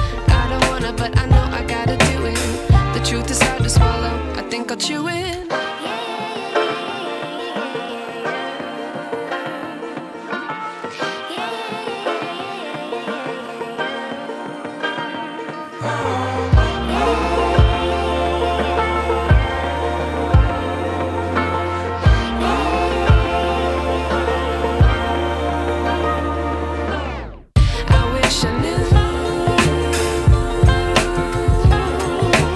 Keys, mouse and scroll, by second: 1.0 click, 6.3-6.6 click, 10.4 click, 12.6 ctrl+a, 13.8 click, 17.2 ctrl+v, 17.8-18.4 drag, 19.2 right click, 20.1 click, 22.4 ctrl+x, 23.1-27.0 drag.